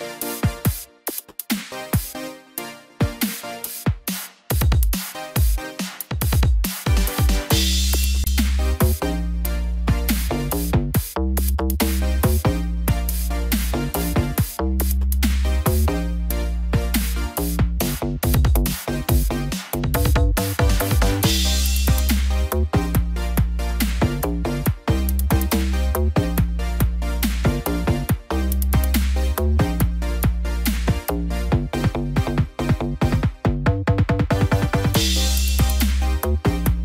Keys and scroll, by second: 1.3 ctrl+=, 19.3 ctrl+-, 19.7 ctrl+0.